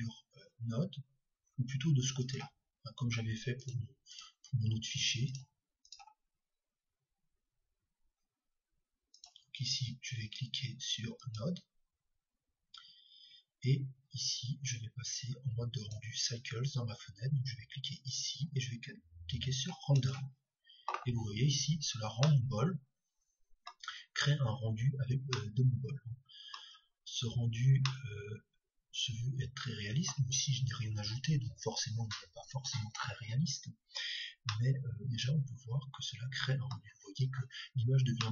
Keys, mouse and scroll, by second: 2.2-4.1 drag, 9.1-11.1 drag, 15.7-17.6 drag, 17.9-19.9 drag, 22.4-24.2 middle drag, 24.7-27.5 middle drag, 28.0-29.7 middle drag, 34.5-36.2 middle drag.